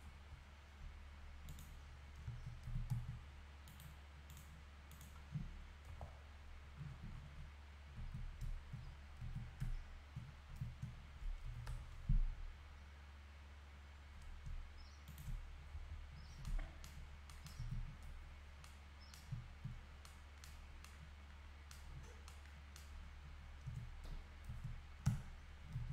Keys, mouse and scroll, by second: 0.0 scroll down 2, 0.1 KP_Divide, 1.5 click, 1.9-2.3 scroll down 10, 2.3 Tab, 2.7 a, 2.9 Tab, 3.3-3.9 scroll up 4, 3.7-5.9 right drag, 5.9 KP_Divide, 6.9-7.3 scroll down 11, 8.0 z, 8.8-9.2 scroll up 5, 9.2 z, 10.2 scroll down 3, 11.4 scroll down 1, 11.4 g, 15.7 KP_Decimal, 16.2 scroll up 1, 17.1 scroll down 2, 17.6 z, 17.9-18.3 scroll up 2, 18.3-18.7 scroll down 1, 19.8 scroll up 2, 20.6-20.9 scroll down 1, 22.0 scroll down 2, 23.1-23.6 scroll up 1, 24.5 Tab, 25.1 Tab, 25.8 a.